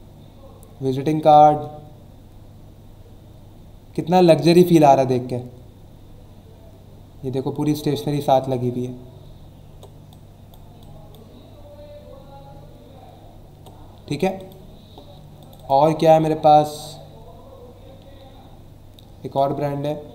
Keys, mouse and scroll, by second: 0.2 scroll down 1, 2.9 scroll down 1, 3.5 scroll down 1, 5.0 scroll down 1, 5.7-7.1 scroll down 3, 8.7 ctrl+scroll up 1, 9.5 ctrl+scroll up 1, 10.1-11.5 drag, 11.5-12.2 scroll down 2, 12.6 scroll up 1, 13.2 ctrl+scroll down 1, 14.4 click, 15.4 click, 18.0-18.4 ctrl+scroll up 1, 18.7-19.8 ctrl+scroll up 3.